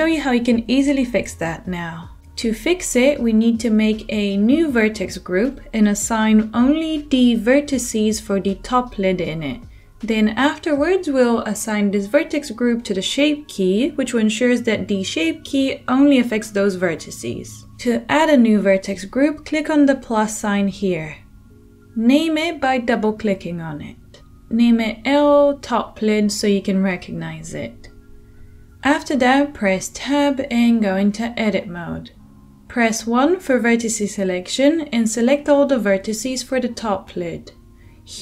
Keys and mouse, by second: 30.4 Tab, 32.0 1.